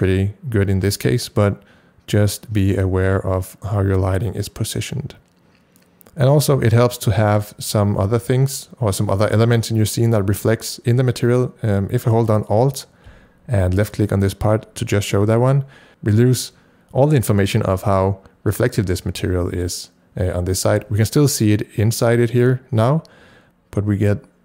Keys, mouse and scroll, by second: 3.1-10.6 ctrl+drag, 13.3-15.9 ctrl+drag.